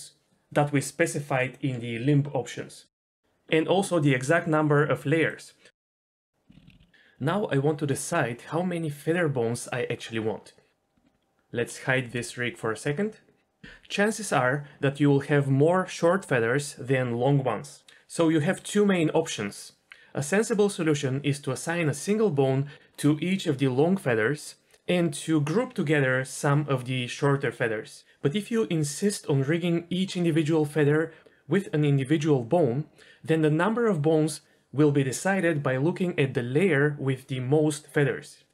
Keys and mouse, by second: 3.2 g, 5.1 click, 5.2 g, 5.4 click, 6.5-6.8 ctrl+z, 10.9 Tab, 12.0 h.